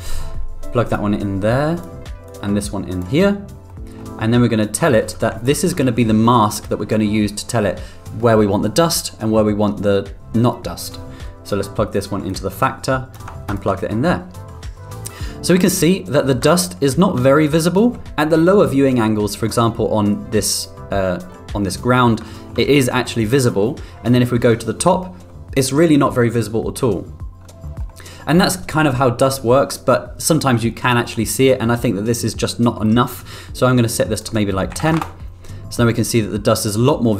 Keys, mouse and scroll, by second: 1.5 click, 2.2 click, 3.6-4.0 middle drag, 5.4 ctrl+click, 12.4-13.1 drag, 16.6 middle click, 21.3 middle click, 22.2 middle drag, 24.1-24.9 middle drag, 27.8 middle click, 31.6-32.8 middle drag, 34.1-35.7 drag, 37.0-37.1 middle drag.